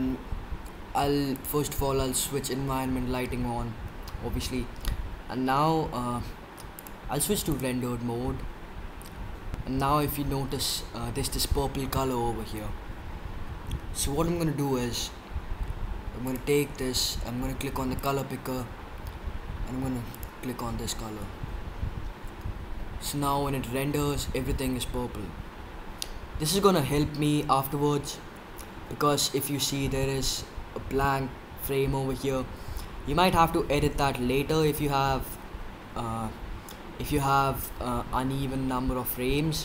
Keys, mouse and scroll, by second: 1.2-3.1 drag, 5.8-6.7 middle drag, 6.7-8.8 drag, 16.6-18.3 drag.